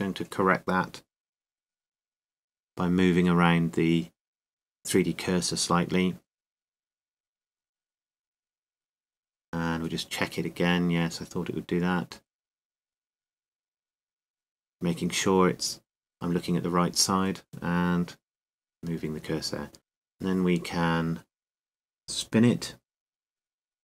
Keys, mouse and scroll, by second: 0.0 ctrl+z, 1.9 KP_1, 4.8-6.7 drag, 6.4 a, 7.3-9.8 drag, 11.0 KP_3, 17.3 KP_3, 18.9 click, 21.7 a.